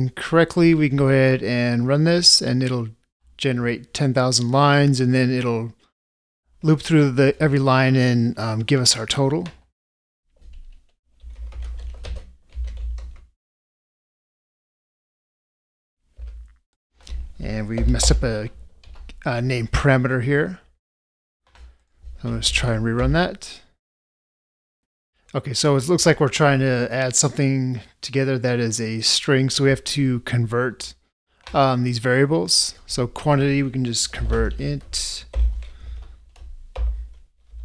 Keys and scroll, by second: 35.5 ctrl+space.